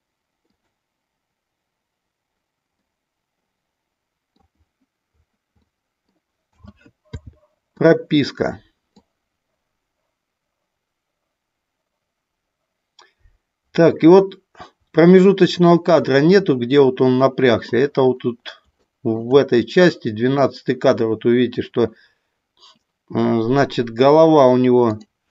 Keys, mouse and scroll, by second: 0.5 click, 2.7 scroll up 1, 2.8-4.5 middle drag, 5.6 middle click, 6.4 a, 7.0 i, 9.0-17.7 drag, 18.7 shift+middle click, 19.5 middle click, 24.9 click.